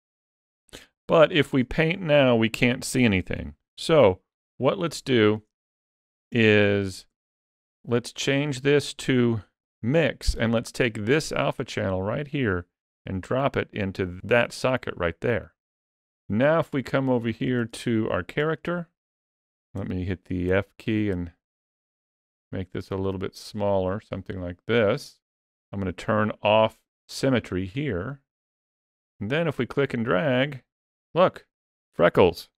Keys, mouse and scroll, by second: 1.4 click, 3.6 ctrl+z, 4.7 shift+middle click, 5.6 shift+middle click, 6.5 ctrl+middle click, 7.1 shift+middle click, 8.2 click, 11.1 click, 15.7 ctrl+z, 16.6 ctrl+middle click, 17.6 shift+middle click, 18.4 middle click, 19.1 ctrl+middle click, 19.5 f, 27.7 click, 29.9 click.